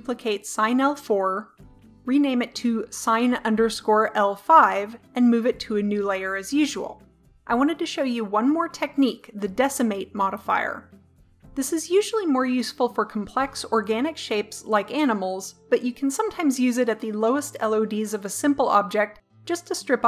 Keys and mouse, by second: 1.9-3.3 drag, 5.9 m, 6.9-20.0 drag.